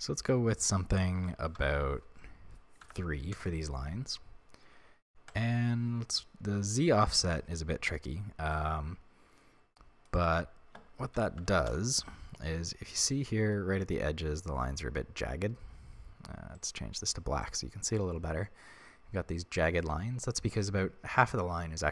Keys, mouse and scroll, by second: 3.4 Return, 7.9 right click, 8.5-13.1 drag, 11.7 Return, 12.4-12.8 scroll up 1, 13.1-16.5 shift+middle drag, 13.7 scroll up 2, 16.5-19.9 drag, 20.1-20.5 scroll down 1, 20.5-21.9 shift+middle drag.